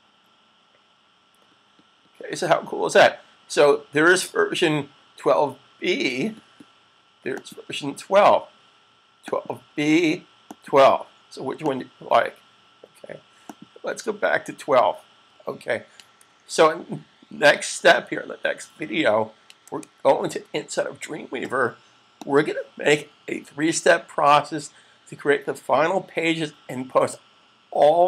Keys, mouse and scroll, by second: 7.1 click, 19.6 super+Tab, 22.4 click.